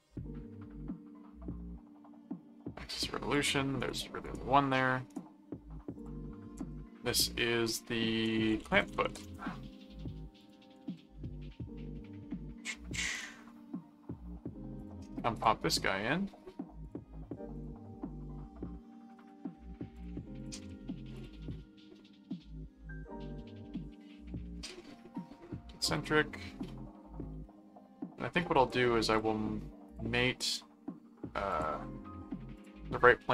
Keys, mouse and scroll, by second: 3.3 click, 3.8 right click, 5.1 right click, 6.0 click, 6.5 ctrl+s, 8.2-9.7 typing, 10.4 click, 10.8 ctrl+Tab, 13.1 ctrl+click, 14.8 click, 16.8 click, 17.5 click, 19.2 click, 19.9 ctrl+click, 21.1 click, 25.9 click, 28.6 click, 29.4 click, 29.9 click, 31.5 click, 32.5 click.